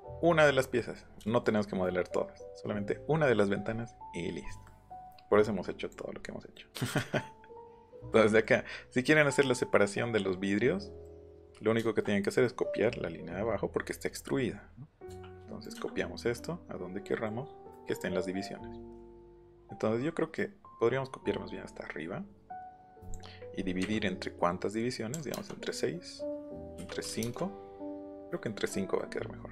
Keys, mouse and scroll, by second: 5.4 click, 6.5 middle click, 7.6 middle click, 15.7-17.1 drag, 17.1 middle click, 17.7 middle click, 23.0 click, 23.8 KP_Divide, 25.1 KP_6, 26.8 KP_Divide, 27.1 KP_5, 27.2 KP_Enter, 29.0-29.5 middle drag.